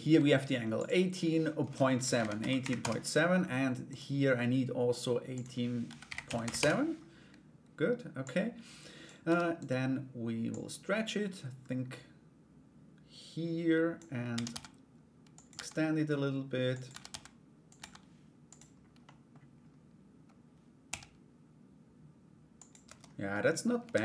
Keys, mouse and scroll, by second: 0.4-2.7 drag, 3.5 right click, 4.9-6.5 drag, 7.8 click, 8.8 Tab, 9.1 right click, 10.1-13.5 drag, 17.3 e, 18.7 middle click, 20.4 s, 22.4 Tab, 22.9 middle click, 23.5 ctrl+a.